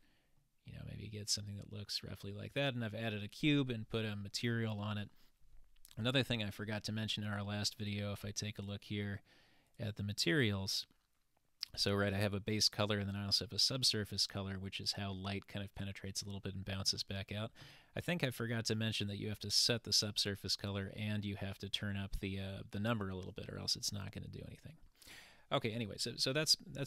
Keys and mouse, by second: 0.4 middle click, 1.2 shift+middle click, 2.6 click.